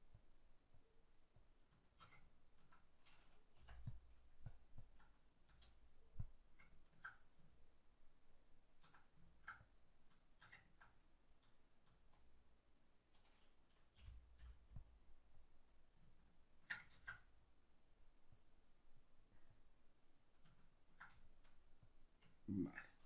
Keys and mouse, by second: 1.9-3.9 shift+middle drag, 3.9-6.7 drag, 5.5 z, 6.7-9.7 ctrl+middle drag, 9.7 click, 10.2-14.9 shift+middle drag, 11.9 z, 14.9 click, 16.2-17.5 ctrl+middle drag, 16.9 ctrl+z, 17.5-20.6 drag, 20.6-21.9 ctrl+middle drag, 21.9 click, 22.3-23.0 ctrl+middle drag.